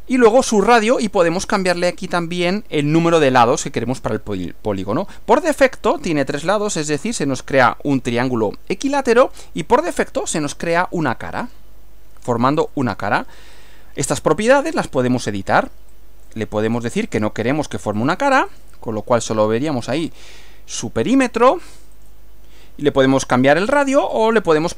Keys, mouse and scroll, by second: 6.6 click, 9.4-11.7 middle drag, 12.6 click, 13.6 click, 14.8 click, 15.9-16.5 drag, 16.8 click, 17.2 click, 18.0 click, 18.5 click, 22.0 click, 24.2 click.